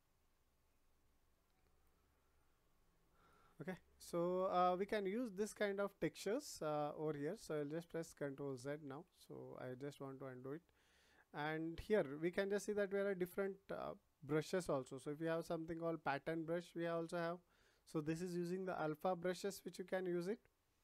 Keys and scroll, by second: 5.8 ctrl+z.